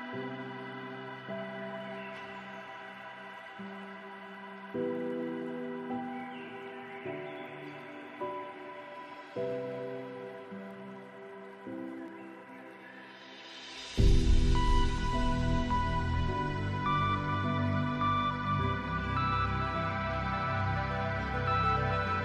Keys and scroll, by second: 21.4 ctrl+z.